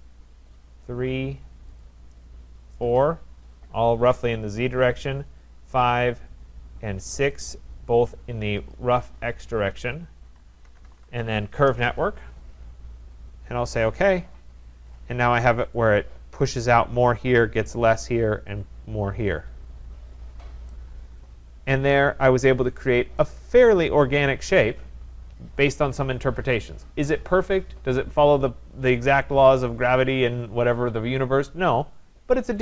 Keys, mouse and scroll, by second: 0.8 click, 1.8 click, 2.8 shift+click, 3.7 shift+click, 5.4 shift+click, 6.3 shift+click, 7.5 shift+click, 8.7 shift+click, 10.4-11.6 typing, 13.9 click, 14.6 click, 14.9-15.2 scroll, 15.2-15.9 typing, 15.8 right click, 16.1 scroll, 17.0 middle click, 20.1 middle click, 20.2 middle click, 21.1 scroll, 23.2 right click, 23.5 scroll, 24.5 right click, 26.5 middle click.